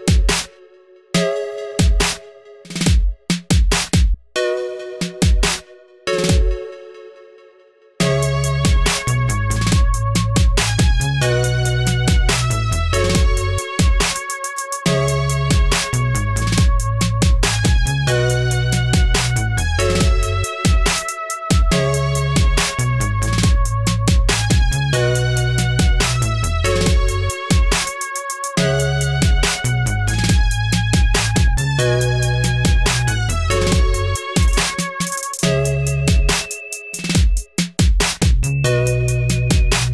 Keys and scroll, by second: 8.0-9.5 typing, 13.5 ctrl+a, 14.2 ctrl+d, 22.0 ctrl+d, 24.4-27.0 typing, 29.3-30.2 typing, 31.8 BackSpace, 32.1 Return, 33.5 ctrl+v, 34.6 /, 34.8 Return, 36.5 ctrl+a, 36.9 ctrl+c, 37.0 ctrl+d.